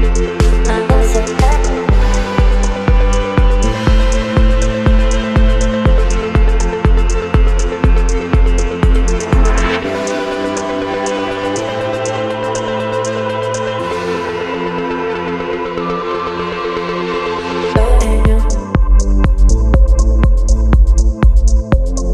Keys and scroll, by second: 0.0 ctrl+t, 5.8 Return, 6.2 space, 6.8 e, 9.3 v, 11.0 space, 12.8 ctrl+t, 17.2 Return, 18.0 space, 18.6 e.